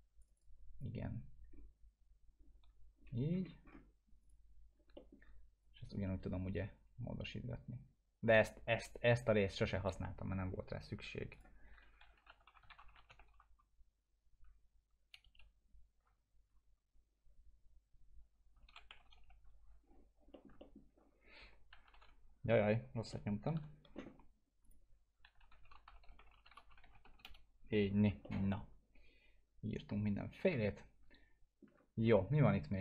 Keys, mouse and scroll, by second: 1.5-1.8 scroll up 1, 4.2 click, 4.9 alt+middle click, 5.6-8.4 drag, 11.4-13.4 typing, 15.2 Return, 18.5 Return, 18.6 ctrl+alt+;, 18.9 shift+9, 19.2 Return, 20.3 middle click, 20.6 alt+middle click, 21.4-22.5 typing, 23.1 middle click, 23.5 p, 24.6 click, 25.0-27.0 typing, 27.2 Return, 28.2-30.4 alt+middle drag.